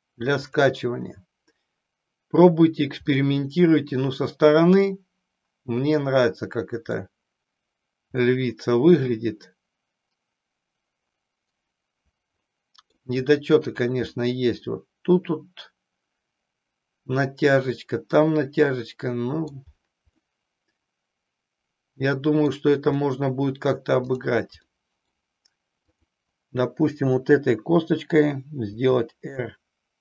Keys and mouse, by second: 1.0 click, 3.2-4.8 middle drag, 6.1 middle click, 8.2-13.1 middle drag, 14.2-19.5 middle drag, 20.1-22.5 middle drag, 24.7 middle click, 26.0 click, 28.6 r.